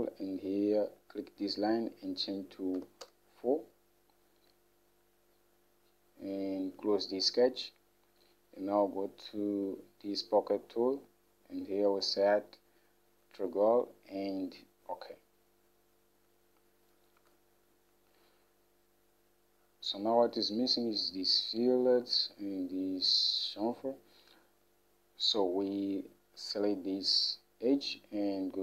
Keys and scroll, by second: 3.0 4, 3.2 Return, 6.5 typing, 17.4 Home.